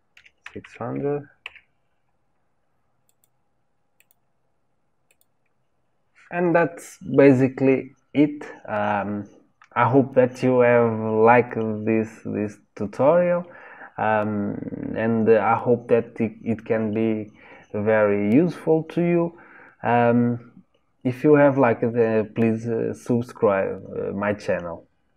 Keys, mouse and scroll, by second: 0.6 KP_0, 1.6 scroll down 1, 3.1 click, 4.0 click, 5.1 click.